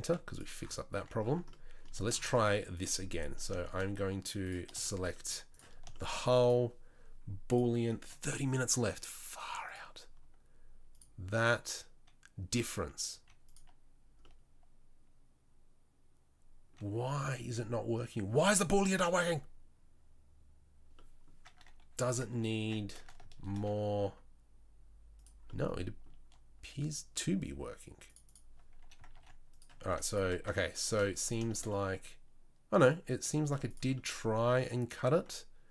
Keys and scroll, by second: 0.0 z, 0.9 Tab, 13.1 z, 22.6 Tab, 23.5 ctrl+r, 29.1 ctrl+r, 29.8 1, 33.4 z.